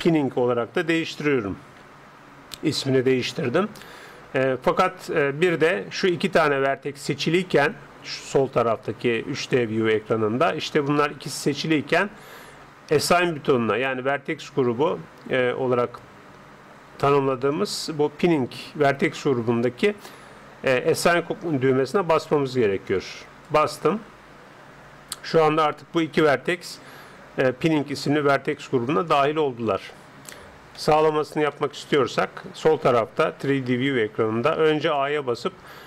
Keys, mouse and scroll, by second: 0.2 n, 23.5-25.2 drag, 30.8-33.2 middle drag, 35.0 a.